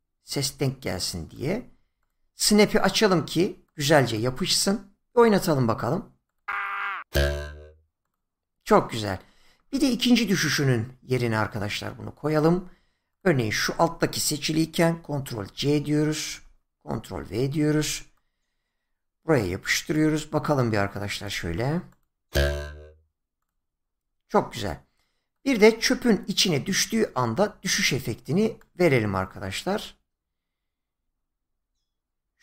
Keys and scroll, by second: 15.3 ctrl+c, 16.3 ctrl+v.